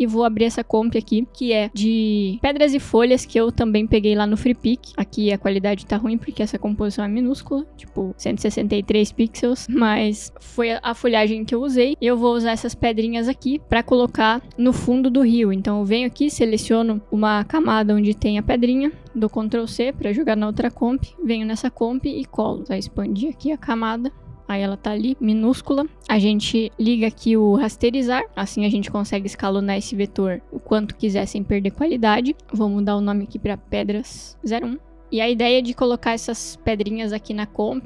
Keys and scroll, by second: 7.6 ctrl+k, 14.9 ctrl+c, 20.2 ctrl+c, 22.3 ctrl+v, 28.8 s, 33.0 Return, 33.2-34.5 typing.